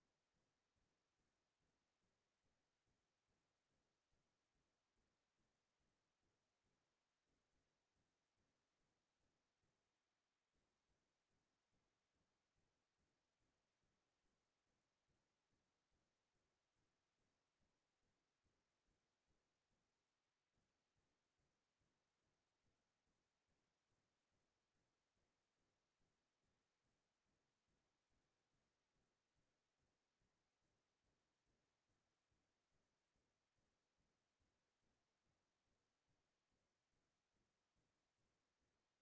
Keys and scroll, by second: 0.3 alt+Right, 12.2 ctrl+space, 17.5 ctrl+space, 20.7 ctrl+space, 23.0 ctrl+t, 28.2 ctrl+space, 29.0 ctrl+space, 32.2 ctrl+s.